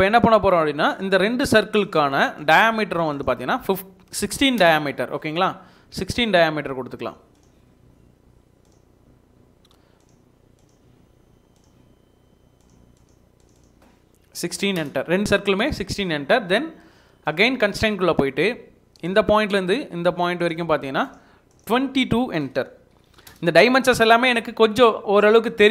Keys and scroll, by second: 3.9-4.8 typing, 14.3-14.7 typing, 14.7 Return, 15.4 Escape, 23.0 typing, 23.3 Return.